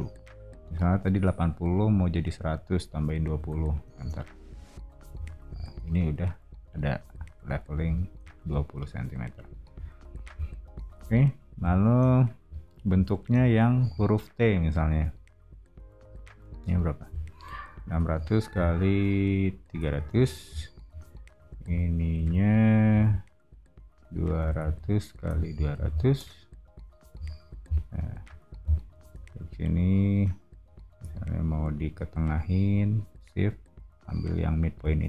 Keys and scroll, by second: 3.0-3.9 typing, 4.0 Return, 5.1 space, 7.1 o, 13.9 r, 17.5-20.8 typing, 22.1 r, 24.1-27.1 typing, 29.0 space, 31.0 m.